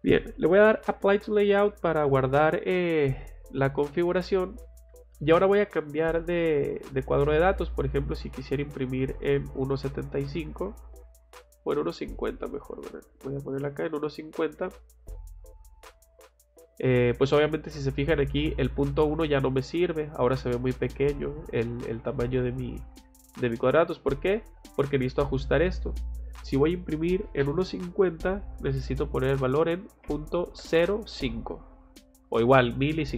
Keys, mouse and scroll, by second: 4.1 click, 7.3 click, 8.0 middle click, 8.4 middle click, 9.7 click, 12.7 click, 13.4 click, 14.5 click, 15.1 middle click, 15.9 click, 18.6 click, 24.8 click, 32.2 click.